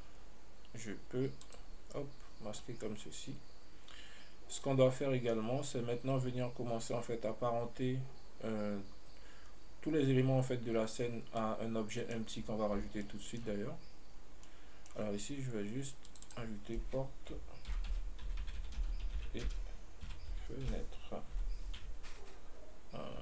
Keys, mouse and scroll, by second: 1.7 click, 2.8 scroll down 1, 2.9-5.9 middle drag, 6.2 scroll up 1, 11.7-14.6 middle drag, 14.6 scroll down 1, 14.7-15.2 middle drag, 16.4 click, 16.5-20.6 drag.